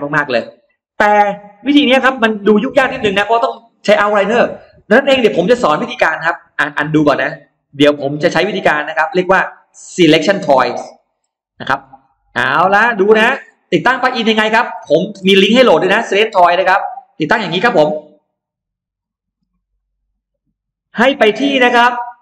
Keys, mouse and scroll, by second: 0.8-2.1 scroll down 4, 1.3 middle click, 2.7 click, 3.9 BackSpace, 4.3 BackSpace, 4.7 BackSpace, 5.9 middle click, 7.4 click, 7.9 click, 8.9-9.6 scroll up 2, 9.4-10.7 middle drag, 10.8-11.1 scroll down 1, 11.2-11.8 scroll up 2, 11.7 middle click, 12.3-14.7 scroll down 9, 13.5 middle click, 14.3 middle click, 14.9 middle click, 14.9-15.7 scroll up 1, 15.5 middle click, 15.7 scroll down 1, 16.4 scroll up 1, 18.9 F9.